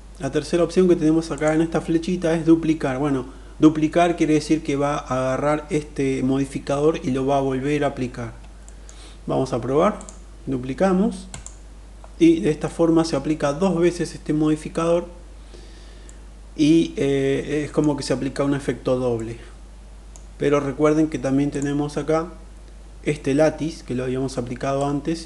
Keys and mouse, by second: 1.1-3.9 drag, 8.2 middle click, 9.6-11.1 drag, 12.2 middle click, 15.7-17.4 middle drag, 18.8-19.7 middle drag, 21.0 click, 24.5-25.2 drag.